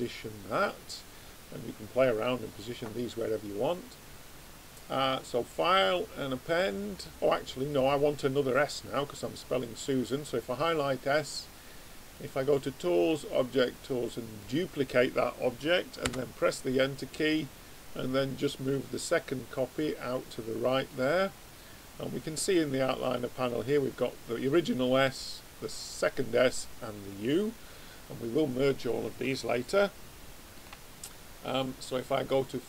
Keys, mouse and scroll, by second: 1.1-3.0 middle drag, 3.6 click, 7.8-10.6 drag, 11.5-14.0 drag, 17.1 click, 21.9-23.6 middle drag, 23.6-28.4 drag, 28.5-31.7 middle drag, 31.7 click.